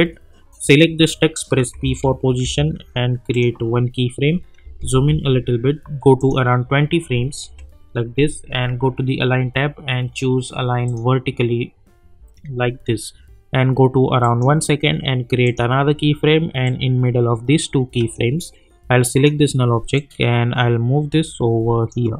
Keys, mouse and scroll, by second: 1.7 p, 2.4 p, 3.3 click, 4.6 =, 4.9 =, 6.2 click, 7.4 Page_Down, 10.8 click, 14.2-22.1 drag.